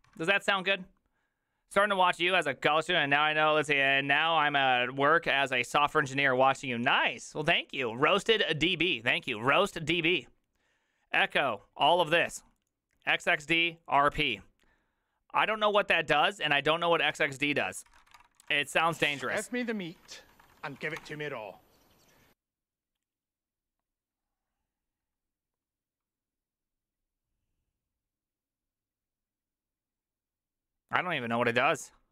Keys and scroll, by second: 0.0-0.1 typing, 17.8-21.5 typing, 19.0 ctrl+c.